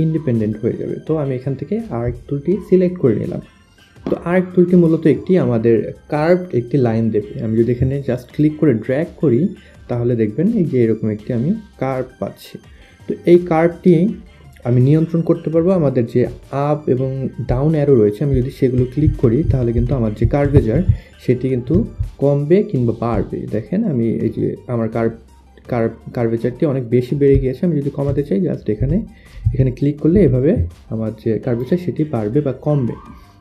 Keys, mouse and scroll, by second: 8.0 click, 17.9 click, 18.3 click, 18.8 click, 19.2 click, 19.5 click, 20.0 click, 20.2 click, 22.7 click, 22.8 click, 23.1 click, 24.2 click, 26.9 click, 28.4 click, 29.2 click.